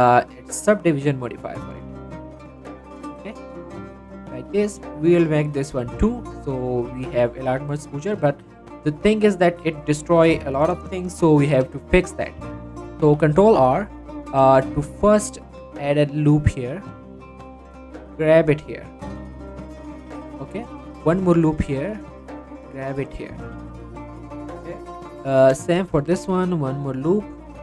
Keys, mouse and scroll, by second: 0.2 click, 3.2-6.0 right drag, 6.0 click, 6.4 middle click, 7.4 Tab, 7.8 middle click, 8.0 scroll up 1, 8.3 middle click, 8.7 shift+middle click, 8.8 shift+scroll up 1, 9.1-15.7 middle drag, 15.7 ctrl+r, 16.5 click, 19.2 click, 19.6 shift+middle click, 20.4 scroll up 1, 21.1 ctrl+r, 21.5 click, 23.3 scroll down 1, 23.5 middle click, 23.8-24.1 scroll up 1, 24.1 middle click, 25.6 shift+middle click, 25.8 scroll up 1, 26.2 ctrl+r, 27.3 click.